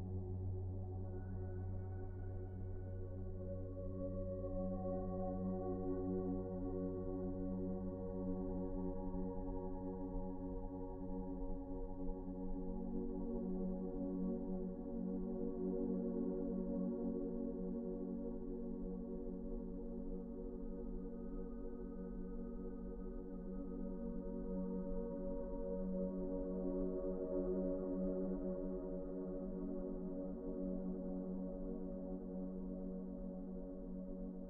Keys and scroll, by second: 30.6 s.